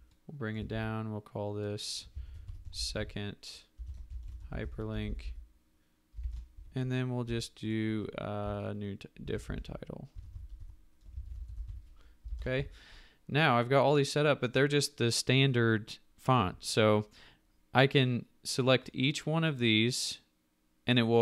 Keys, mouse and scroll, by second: 0.4 shift+click, 0.7 t, 2.0-7.2 typing, 6.2 ctrl+Return, 9.0-12.5 typing, 12.3 ctrl+Return.